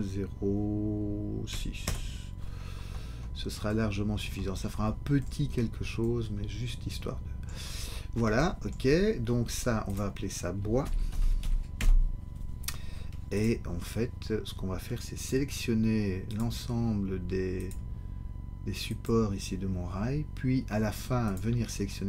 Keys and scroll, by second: 1.8 Return, 10.8 shift+b, 11.1 o, 11.2 i, 11.4 s, 11.8 Return.